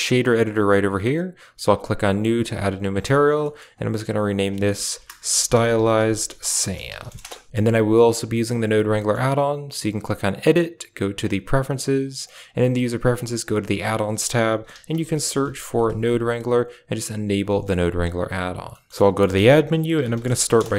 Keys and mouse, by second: 0.8 click, 1.6 click, 3.3 middle click, 4.3 click, 8.1 a, 8.2 middle click, 8.5 click, 8.9 middle click, 9.7 typing, 10.4 click, 18.6 middle click, 19.2 shift+a.